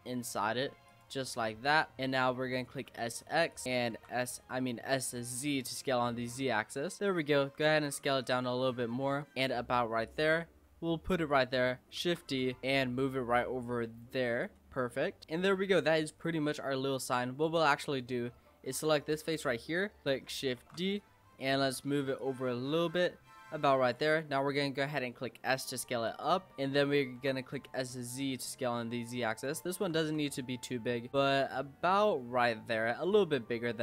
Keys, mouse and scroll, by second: 1.6 click, 2.0 shift+middle click, 2.1-2.6 scroll down 5, 2.8 s, 3.9 s, 7.4 s, 8.6 s, 10.1 click, 12.0 shift+d, 12.6 click, 14.7 Tab, 16.0 click, 16.5-17.0 middle drag, 17.0 Tab, 17.4 click, 19.3 click, 20.6 shift+d, 21.3 shift+middle click, 22.2 click, 24.2 middle click, 25.1 s, 26.5 click, 27.2 s, 29.8 s, 33.3 scroll up 1, 33.4 middle click.